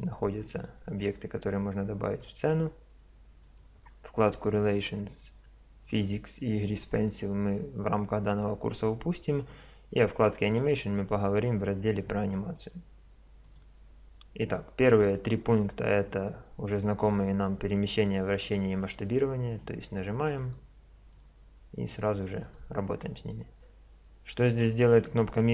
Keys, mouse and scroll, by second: 3.4 click, 5.8-8.4 drag, 9.5-11.2 drag, 13.4-15.2 drag, 19.5-23.0 drag.